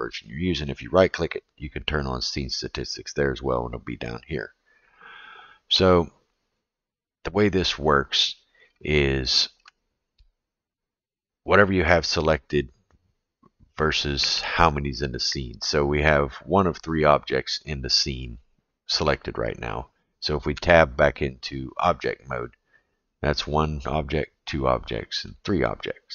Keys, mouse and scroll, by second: 0.6-2.9 right drag, 8.9 shift+middle click, 20.5 Tab, 23.1 click, 24.1 click, 25.2 click.